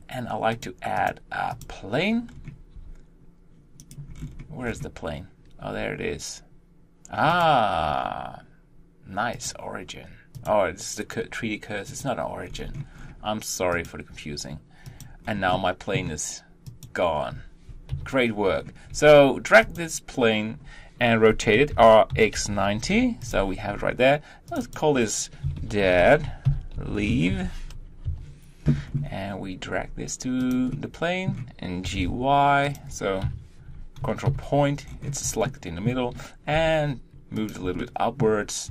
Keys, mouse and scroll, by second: 0.5-2.3 drag, 2.3-2.7 scroll down 1, 2.7 g, 4.1-4.7 scroll down 1, 4.7-5.6 scroll down 1, 5.6 g, 9.3 click, 10.3 click, 11.8 click, 12.5-13.7 scroll up 1, 13.7 click, 14.8 click, 15.2 scroll down 3, 15.5-16.0 middle drag, 16.0 scroll up 1, 16.7 click, 17.9 KP_1, 18.5-18.9 scroll up 3, 18.9 g, 21.7 r, 24.5 click, 26.2-27.7 drag, 28.8-29.8 scroll up 4, 29.8 g, 30.7-31.8 middle drag, 31.8 g, 34.9-35.5 scroll down 1, 35.5-35.9 shift+middle drag, 35.9 shift+scroll, 36.5 g, 37.8-38.7 shift+middle drag.